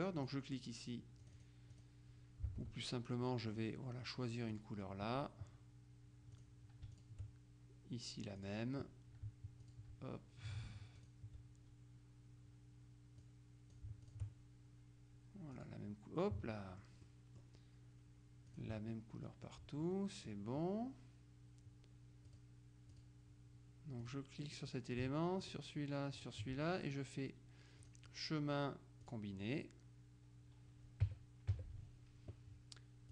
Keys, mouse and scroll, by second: 0.3 click, 1.3-2.4 drag, 2.6 alt+Tab, 3.3 middle click, 4.6 click, 6.4-7.7 drag, 8.5 click, 9.7 shift+click, 11.1 shift+click, 13.3-14.7 drag, 15.7 click, 16.6 middle click, 17.7-18.1 scroll up 1, 18.6 click, 19.9 middle click, 22.4 click, 23.2 click, 24.1 click, 25.5 shift+click, 26.3 click, 27.9 click, 29.1 click, 31.1 KP_Subtract.